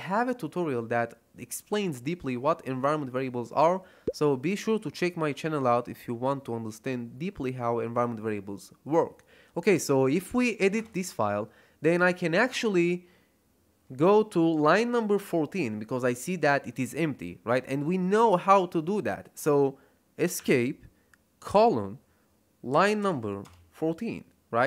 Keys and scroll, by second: 10.7 Return, 20.3 Escape, 21.5 shift+;, 22.6 1, 22.9 4, 23.4 Return.